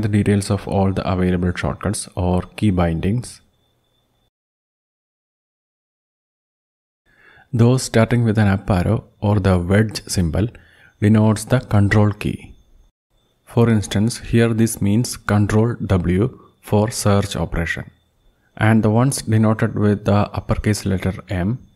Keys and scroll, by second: 0.0 ctrl+g, 4.9 ctrl+Down, 6.7 Down, 7.4 Down, 8.1 Down, 8.9 Down, 9.1 Down, 9.5 Down, 10.4 Down, 10.5 Down, 11.0-11.7 Down, 12.1 Down, 12.3 Down, 12.7 Down, 12.9-18.9 Down, 19.1-20.1 Down, 20.2-21.4 Down, 21.5-21.7 Down.